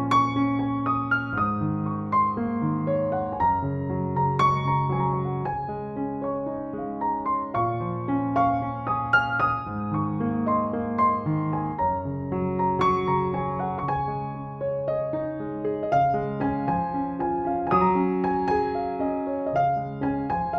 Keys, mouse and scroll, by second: 3.8 alt+i, 4.1 alt+y, 5.7 click, 8.1 ctrl+j, 8.9 right click, 9.4 click, 10.1-10.6 typing, 10.8-11.6 click, 11.7 ctrl+z, 12.1-12.6 click, 12.7-14.0 click, 13.5 click, 14.1-14.6 click, 14.8-15.8 click, 15.3 click, 16.0-16.8 click, 16.8-17.8 click, 17.2 click, 17.9 space, 18.0-18.7 click, 18.3 space, 18.5-19.0 drag, 20.1-20.5 click.